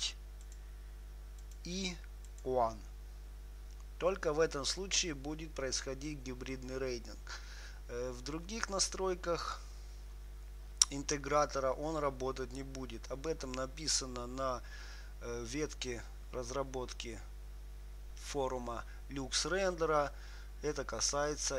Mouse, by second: 0.8-3.6 drag, 11.7-21.5 drag.